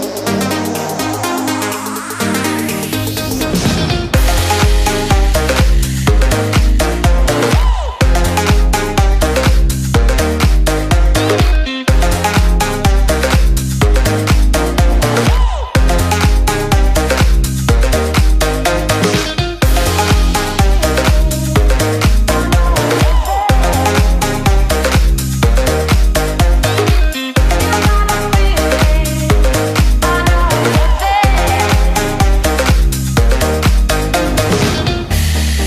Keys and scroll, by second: 17.0 ctrl+space, 19.1 ctrl+shift+], 23.1 ctrl+z.